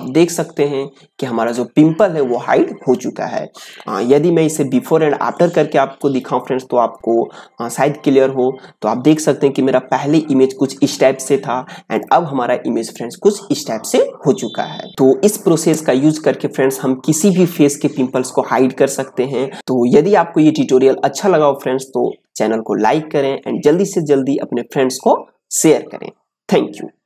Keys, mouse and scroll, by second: 0.0 click, 0.3 space, 0.6-5.3 ctrl+drag, 5.3 space, 5.5 click, 5.7 space, 9.1 click, 11.9 click.